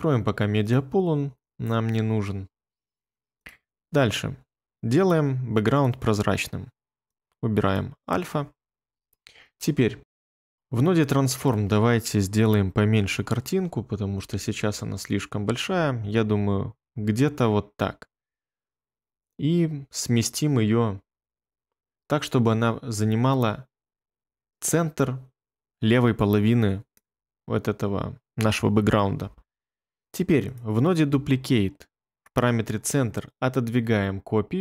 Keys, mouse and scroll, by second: 9.1 ctrl+middle click, 10.0 ctrl+middle click, 10.2 ctrl+middle click, 10.2 ctrl+middle click.